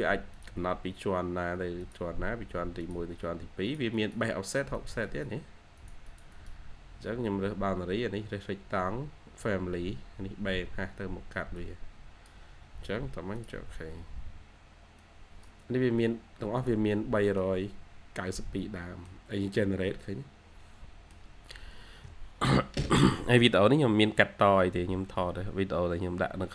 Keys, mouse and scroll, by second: 0.2 double click, 3.8 double click, 4.9 double click, 14.2-17.2 scroll down 1, 17.2 middle click, 17.3 scroll down 1, 18.3 middle click, 19.5 scroll down 1, 19.8 scroll up 1, 19.9 middle click, 21.6 scroll down 1, 24.8 scroll down 1.